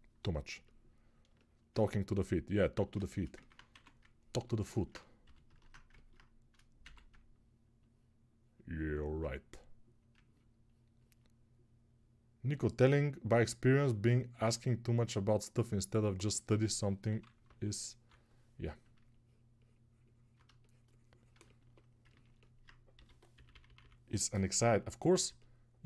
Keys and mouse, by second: 18.8 ctrl+[.